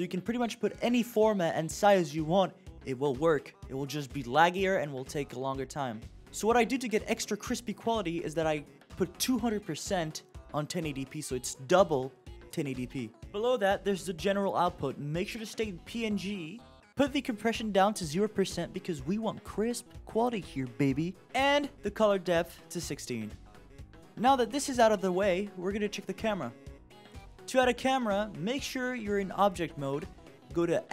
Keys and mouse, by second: 15.1-17.7 drag, 18.7 click, 22.1 click, 28.5-29.2 drag, 30.0-30.9 drag.